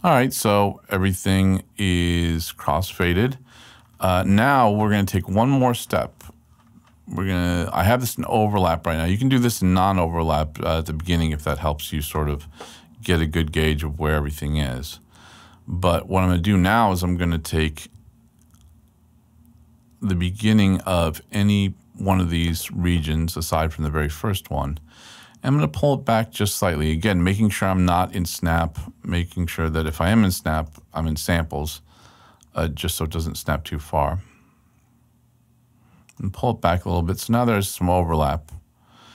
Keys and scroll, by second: 0.5 super+Left, 1.9 super+Left, 17.9 super+Right, 21.4 super+Right.